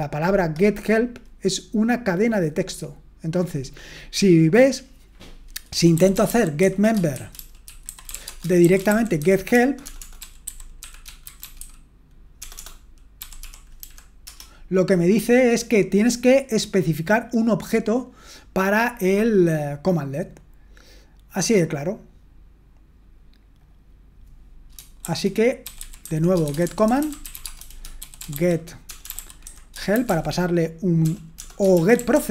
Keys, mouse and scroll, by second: 5.7-14.3 typing, 20.2-21.0 scroll down 1, 21.0-23.6 scroll down 1, 23.6-25.0 drag, 25.0-32.3 typing.